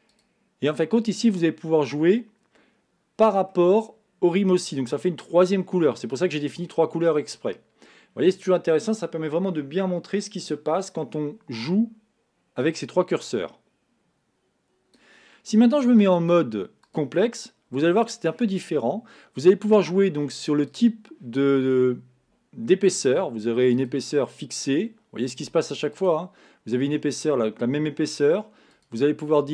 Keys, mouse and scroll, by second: 0.2-2.9 drag, 3.6-5.5 middle drag, 5.5-6.3 scroll down 1, 12.7-15.7 drag, 16.1-19.1 drag, 20.7-23.7 drag, 26.0-29.5 drag.